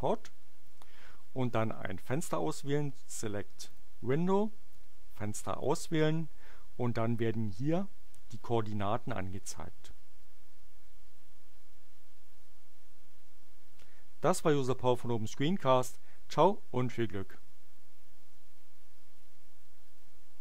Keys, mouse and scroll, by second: 3.6 click, 5.5 click.